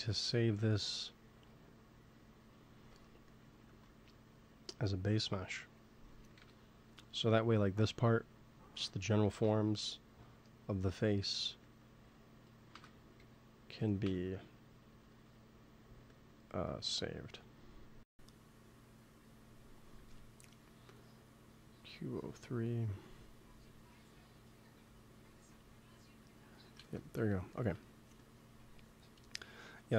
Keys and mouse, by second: 0.3-1.4 middle drag, 1.4 f, 2.1-3.9 drag, 3.6 ctrl+s, 4.7-6.6 drag, 6.3 KP_1, 9.2 shift+d, 12.6 alt+g, 13.9 m, 16.0-17.8 drag, 19.4-21.1 drag, 21.8-23.6 drag, 24.7-27.9 drag, 26.7 ctrl+s.